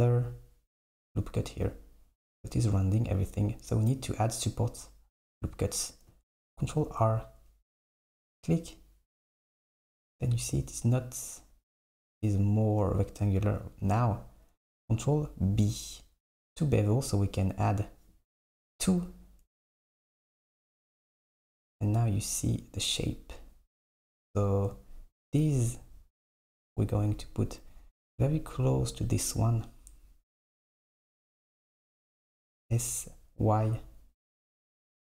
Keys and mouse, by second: 1.4 click, 6.4 ctrl+r, 14.8 ctrl+b, 31.6 s.